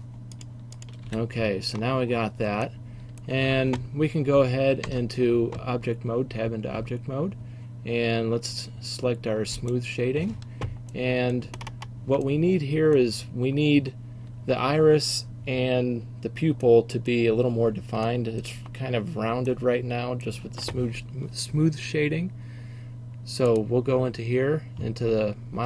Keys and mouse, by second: 1.1 f, 4.9 Tab, 9.7-11.2 drag, 11.2-11.7 middle drag, 12.5-16.9 middle drag, 19.7 middle click, 19.9 middle click, 20.2 middle click, 23.6-25.6 drag.